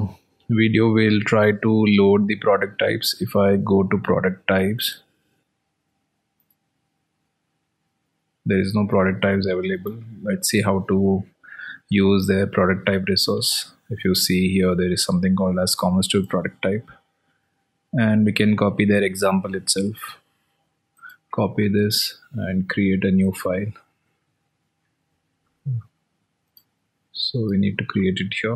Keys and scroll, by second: 15.9 alt+Tab.